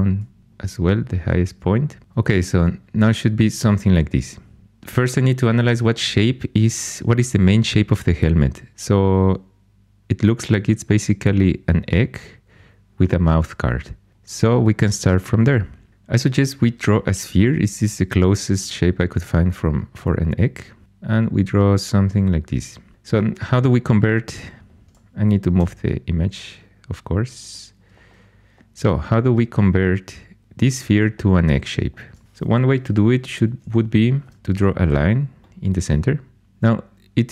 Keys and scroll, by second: 25.5 g, 32.2 1, 33.4 shift+a.